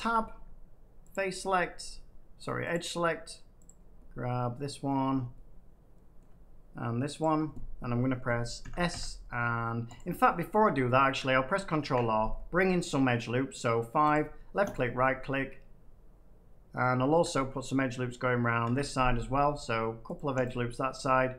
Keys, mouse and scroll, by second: 1.0 click, 2.6-4.5 drag, 4.8 middle click, 6.1-7.1 middle drag, 7.1 shift+click, 8.5 s, 8.8 x, 9.9 right click, 10.4 middle click, 11.7 ctrl+r, 12.1 scroll up 2, 12.3 scroll down 1, 12.3 scroll, 14.1 click, 14.6 right click, 16.7 middle click, 18.6 ctrl+r, 19.1 middle click, 20.2 click, 20.4 right click.